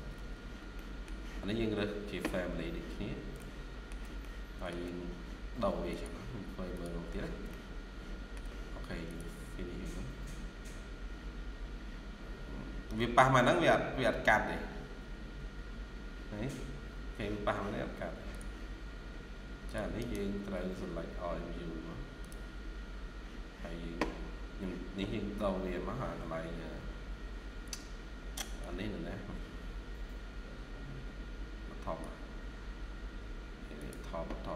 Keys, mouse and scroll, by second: 0.0 Escape, 0.2 scroll down 1, 0.6 middle click, 2.7-3.0 scroll down 1, 3.2 middle click, 3.8 shift+scroll down 1, 4.1 middle click, 7.4 shift+middle click, 11.2 scroll up 1, 13.8-14.4 scroll down 1, 18.6-19.0 scroll up 1, 19.9 right click, 23.3 scroll down 1.